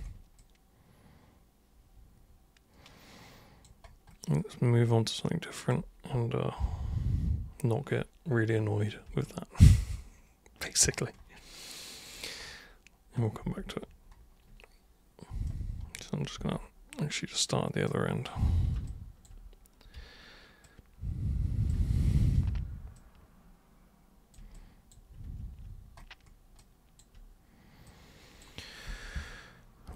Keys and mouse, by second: 0.4-3.6 drag, 4.8 click, 9.2-10.5 alt+super+drag, 12.0 super+click, 13.4 super+w, 15.4 super+right click, 16.3 super+w, 16.9-17.8 super+drag, 18.8-19.2 alt+super+drag, 19.9 super+v, 20.6-21.6 drag, 22.2 super+r, 22.9-24.3 super+drag, 24.5 alt+super+click, 25.2 super+w, 26.6 alt+super+click, 27.8-28.4 super+drag, 28.8 super+r.